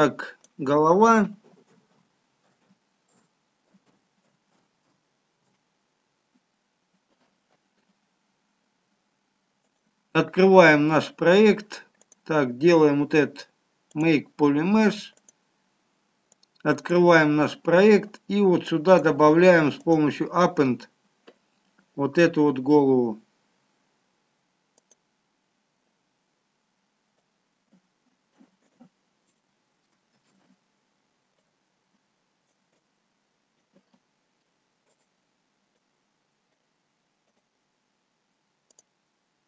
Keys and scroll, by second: 1.7-5.2 typing, 5.8 Return, 30.6 shift+z.